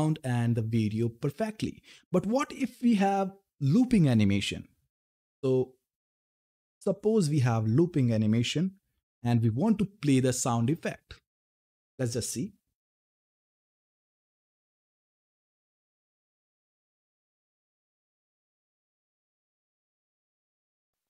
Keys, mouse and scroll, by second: 6.9 click, 8.7 ctrl+F10.